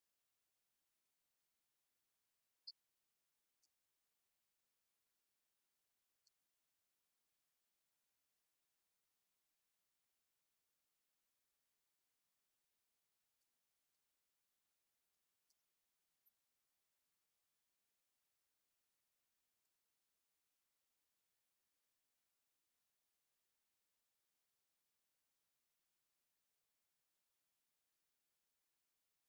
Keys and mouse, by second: 14.6 g, 20.7-25.1 drag, 28.0-29.2 drag.